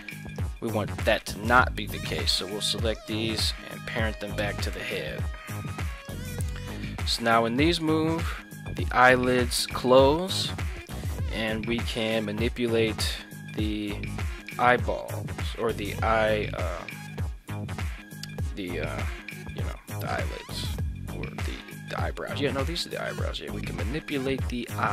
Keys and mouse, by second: 1.6 shift+right click, 3.0 shift+right click, 3.8 ctrl+p, 4.8 Tab, 7.0 g, 9.7 drag, 10.9 right click, 11.6 g, 14.4 right click, 15.2 r, 23.0 click, 23.4-24.9 middle drag.